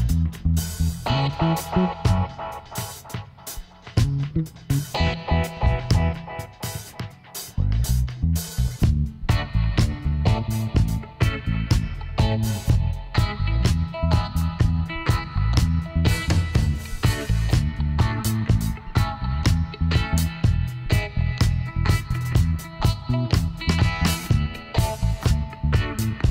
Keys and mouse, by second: 2.1 middle click, 3.5 z, 4.7-7.9 middle drag, 7.9 ctrl+r, 11.3-12.9 drag, 13.6-15.3 drag, 15.4 s, 17.8 right click, 19.7-21.6 middle drag, 21.9 Tab, 22.9 z.